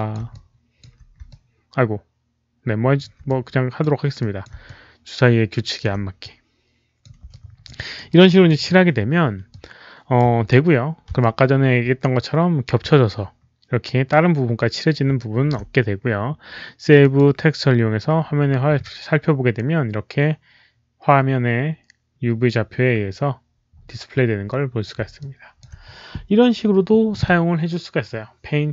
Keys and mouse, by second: 0.2 alt+click, 1.2-2.9 alt+drag, 3.2 alt+click, 4.1 click, 4.6-5.7 alt+drag, 6.1 alt+click, 7.2 alt+click, 7.6 alt+right click, 8.0 alt+click, 9.4 alt+click, 11.1-15.4 alt+drag, 14.4 alt+right click, 16.9 alt+click, 25.1 alt+click, 27.7 alt+click.